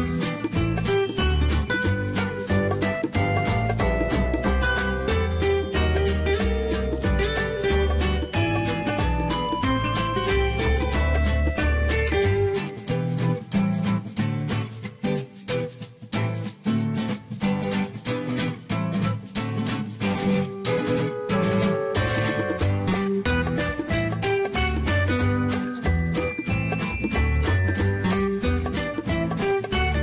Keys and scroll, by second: 3.0-4.8 typing.